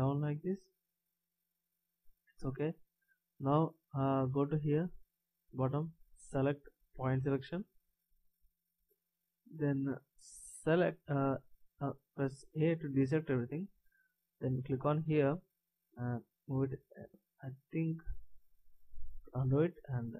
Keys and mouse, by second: 6.9-12.8 drag, 12.8 a, 18.0 a, 19.5 ctrl+z.